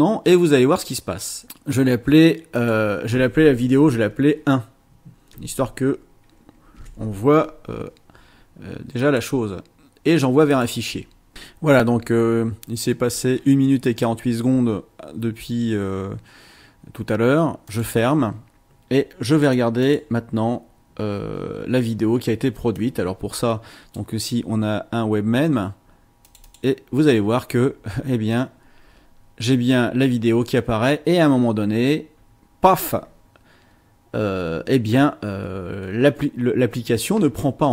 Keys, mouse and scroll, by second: 2.5 click, 4.1 BackSpace, 6.8 KP_1, 9.0 click, 10.5 click, 17.7 click, 19.4 click, 19.8 click, 22.7-24.1 drag, 26.2 click.